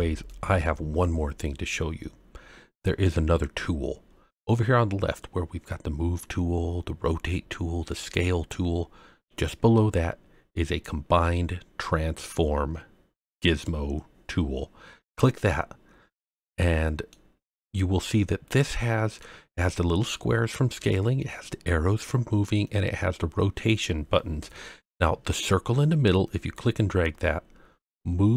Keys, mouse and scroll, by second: 0.2-1.7 middle drag, 3.4-3.7 scroll up 2, 13.3 click, 16.2-17.1 middle drag, 17.3-17.7 scroll up 2, 17.7-19.2 middle drag, 19.4-20.1 scroll up 2, 23.6-24.1 scroll down 2, 24.1-25.2 scroll up 2, 26.3-26.8 scroll down 2, 27.0 click.